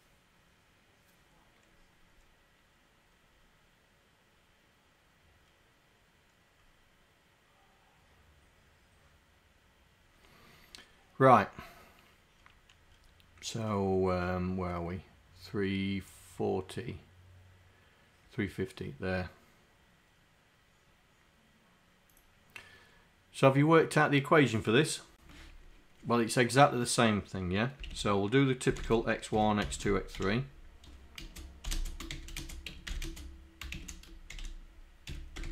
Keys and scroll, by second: 28.8-30.1 typing, 31.3-34.3 typing, 35.4 BackSpace.